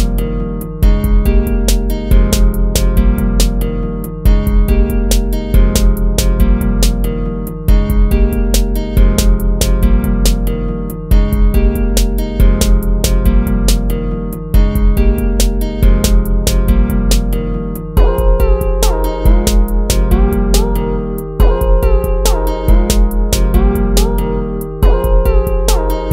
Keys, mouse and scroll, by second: 0.8 ctrl+-, 5.0 ctrl+-, 7.4 ctrl+-, 7.6 ctrl+-, 8.1 ctrl+-, 8.8 ctrl+-, 9.9 right click, 10.1 right click, 11.0 right click, 13.3 ctrl++, 13.4 ctrl+z, 14.0 ctrl+-, 15.9 ctrl++, 18.5 ctrl+z, 22.1 ctrl+-.